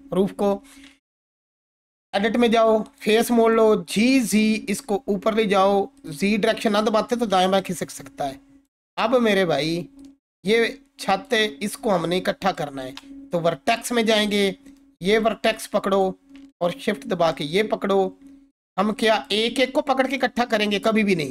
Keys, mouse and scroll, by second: 0.8 Tab, 2.9 click, 3.7-4.6 typing, 6.0 click, 7.9-8.8 alt+click, 9.2-9.8 alt+click, 14.2 click, 17.3 shift+click, 18.5 click, 19.3 g, 20.0 right click.